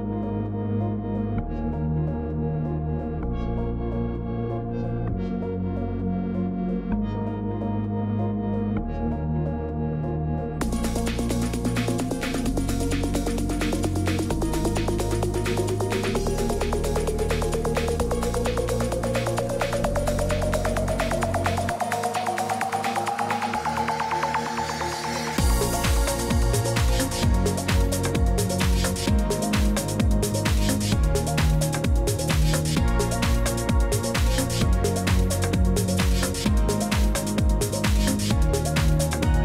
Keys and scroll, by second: 7.3 shift+Down, 7.4 shift+Down, 7.5 shift+Up, 8.0 Up, 8.1 Up, 8.9 ctrl+z, 13.4 8, 14.4 Down, 14.5 Down, 14.6 Down, 14.7 Down, 15.7 Down, 18.2 ctrl+d, 19.1 ctrl+z, 20.1 ctrl+d, 27.2 Left, 27.3 Left, 27.3 Left, 27.4 Left, 29.3-29.7 typing, 33.3 BackSpace.